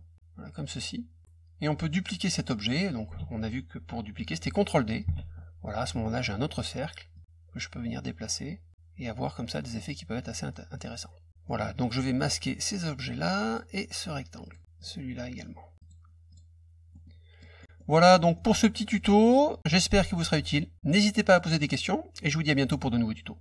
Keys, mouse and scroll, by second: 1.6-2.6 drag, 5.1 ctrl+d, 7.1-11.3 drag, 11.3 middle click, 11.8 click, 13.4 click, 14.4 click, 14.7 click, 15.7 click, 16.3 click, 16.9 middle click, 17.5 middle click.